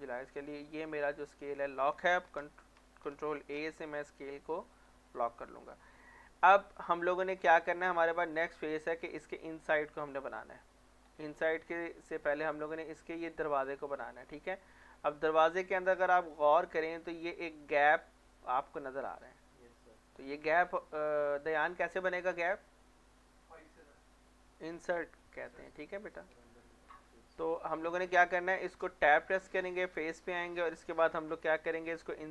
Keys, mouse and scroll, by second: 3.3 ctrl+a, 4.4 click, 5.6 middle click, 7.4-7.9 scroll down 1, 7.9 scroll up 1, 8.2 click, 11.2-11.7 scroll down 1, 11.7 scroll up 1, 14.1-14.8 scroll down 1, 14.8 scroll up 1, 15.3-15.7 scroll down 1, 15.7 scroll up 1, 20.6 scroll down 1, 21.2 click, 24.5 middle click, 25.5 click, 25.9 middle click, 27.9 scroll up 1, 29.0 Tab, 30.3 click, 30.7 scroll down 1.